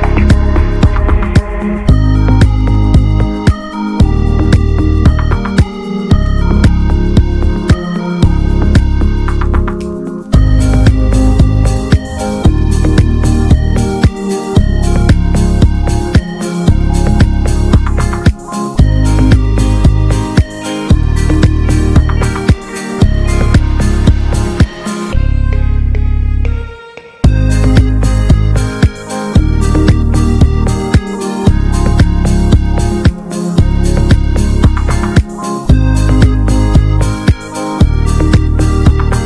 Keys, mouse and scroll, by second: 0.8 scroll down 1, 0.9 alt+middle click, 2.2 click, 3.0 s, 4.6 alt+middle click, 4.8 click, 5.0-5.3 scroll down 2, 5.7-6.8 shift+middle drag, 6.8 ctrl+s, 7.1 click, 7.3-7.8 scroll up 2, 7.8 s, 9.3 alt+middle click, 9.7 s, 11.1 Tab, 11.4 alt+z, 11.5 scroll up 1, 11.7 click, 12.3 s, 13.1 s, 14.5 alt+z, 14.7 middle click, 15.3 scroll down 1, 15.5 middle click, 16.1 alt+middle click, 16.3 alt+z, 16.5-16.8 scroll up 2, 16.8 ctrl+s, 17.3 ctrl+r, 18.2 click, 20.8 click, 22.1 Tab, 22.8 s, 24.5 ctrl+s, 24.7 Tab, 25.0 Tab, 25.2 click, 25.4 ctrl+a, 26.0 ctrl+s, 26.2 Tab, 26.5 click, 27.2-28.0 alt+shift+drag, 28.9 ctrl+b, 32.0 alt+z, 32.4 Tab, 32.5 click, 32.6 scroll down 2, 32.8-33.6 middle drag, 33.6 drag, 33.9 click, 34.1-35.8 right drag, 35.8 click, 36.4 click, 36.7 drag, 36.8 scroll down 1, 37.0 middle click, 37.3 click, 37.4 scroll down 1, 37.5-39.2 shift+middle drag.